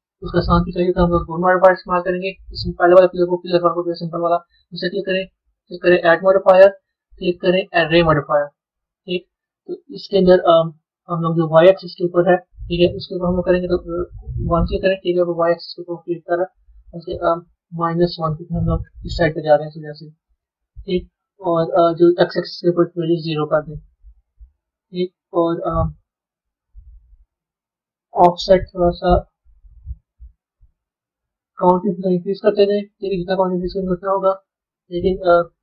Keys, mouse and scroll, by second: 0.8 click, 5.8-8.9 drag, 13.2-16.2 drag, 16.7-19.9 drag, 22.1-25.1 drag, 28.6-30.2 drag, 30.2 ctrl+z, 32.2-35.6 drag.